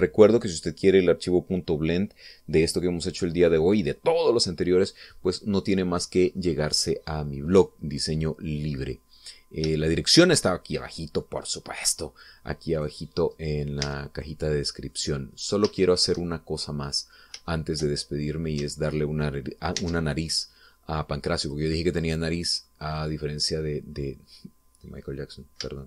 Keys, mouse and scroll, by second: 7.5 middle click, 8.6-8.9 scroll up 1, 9.1-10.2 middle drag, 10.3-10.7 scroll up 1, 11.0 shift+middle click, 12.0 middle click, 13.9 right click, 14.4-14.8 scroll up 1, 14.9 Tab, 15.4 middle click, 16.5-16.8 scroll up 2, 16.9 shift+middle click, 17.5 shift+middle click, 18.7 shift+middle click, 20.9 ctrl+Tab, 22.6 click, 23.2 middle click, 24.3-25.8 middle drag.